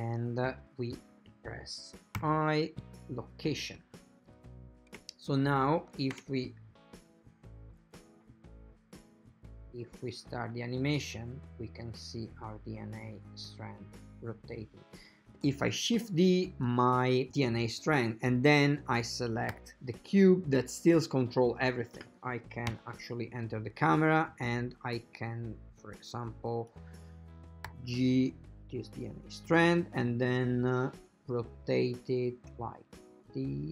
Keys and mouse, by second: 2.2 i, 5.1 space, 6.2 shift+space, 15.4 shift+d, 18.5 right click, 19.7 g, 21.6 typing, 22.8 KP_0, 24.4-26.9 drag, 27.7 g, 32.0-33.7 drag.